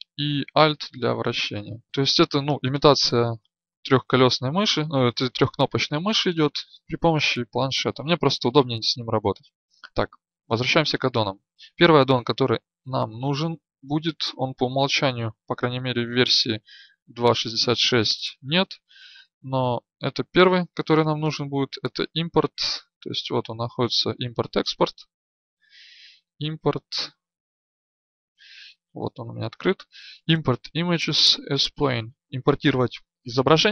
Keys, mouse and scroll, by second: 1.8 KP_1.